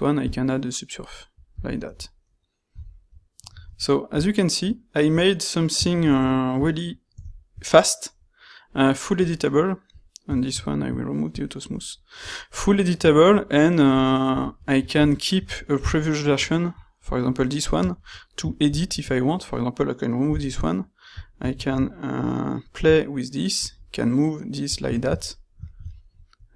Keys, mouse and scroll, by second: 2.7 z, 6.1 shift+z, 10.3 shift+q, 20.2 x, 21.6 ctrl+shift+q.